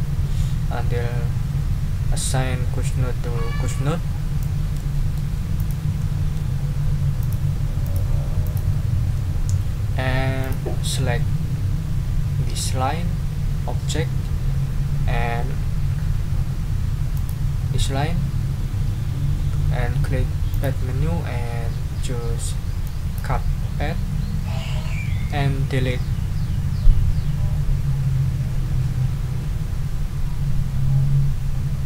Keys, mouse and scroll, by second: 4.7 middle click, 5.6 click, 6.0 middle click, 7.2 click, 7.8 click, 8.4 click, 9.1 middle click, 10.4 click, 17.1 shift+click, 20.5 click, 22.8 middle click.